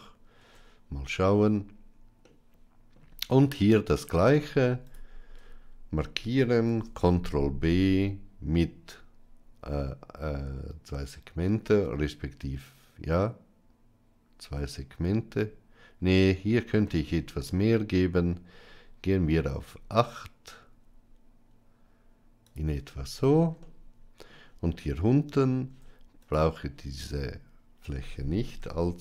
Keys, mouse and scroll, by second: 0.3 Tab, 2.1-2.8 middle drag, 4.0 Tab, 6.6 ctrl+b, 23.6 middle click, 25.6 Tab, 26.1 click, 28.5 i.